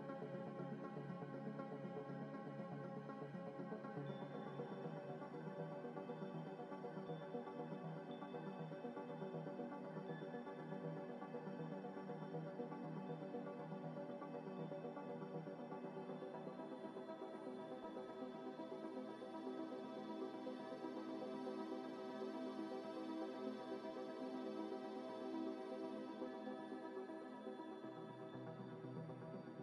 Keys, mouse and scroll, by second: 0.6 ctrl+z, 1.4 middle click, 1.8 scroll down 1, 2.0 s, 2.2 x, 3.8 middle click, 4.2 scroll up 1, 4.4 middle click, 5.1 Tab, 5.4 Tab, 5.4 Tab, 5.5 Tab, 5.9 ctrl+r, 6.7 double click, 7.1 double click, 7.2 ctrl+b, 8.3 scroll down 1, 8.8-9.6 scroll up 1, 9.8 middle click, 10.6 b, 11.1 middle click, 11.5 z, 12.2 middle click, 13.2 alt+e, 16.1 Tab, 16.4 middle click, 17.1 g, 17.1 x, 17.9 ctrl+z, 18.5 ctrl+z, 18.7 g, 19.1 double click, 19.2 right click, 19.8 ctrl+z, 20.0 right click, 20.6 right click, 20.6 middle click, 20.9 Tab, 21.3 Tab, 21.8 scroll down 1, 22.0 middle click, 22.7 scroll up 1, 23.0 middle click, 24.2 scroll down 1, 25.1 scroll up 1, 26.1 Tab, 27.4 z, 28.3 z, 28.3 z, 28.5 z.